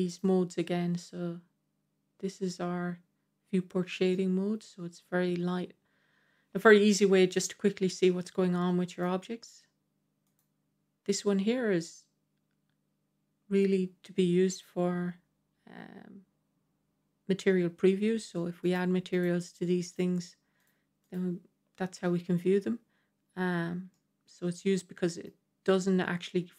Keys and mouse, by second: 0.0 click, 4.0-8.9 middle drag, 10.2 click, 19.0 click, 21.0 click, 23.8-25.2 middle drag, 24.0 typing.